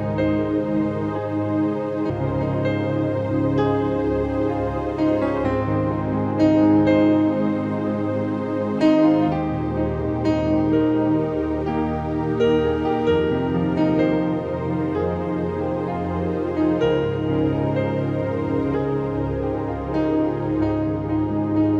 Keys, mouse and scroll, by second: 0.7 click, 5.1 click, 5.3-7.1 drag, 7.1-13.7 drag, 13.2 typing, 13.7 click, 14.3-17.2 drag, 17.2 click, 18.3 typing, 18.5-20.0 drag, 20.2-21.7 drag.